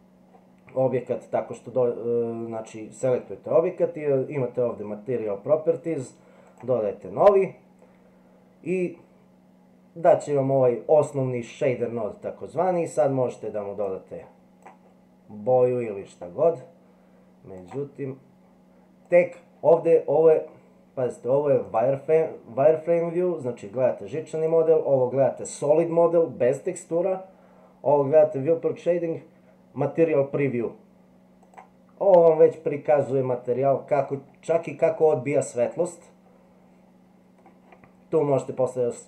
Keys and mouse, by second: 17.6 click, 19.1 click, 21.7 click, 24.4 click, 31.4 click, 34.1-37.4 middle drag.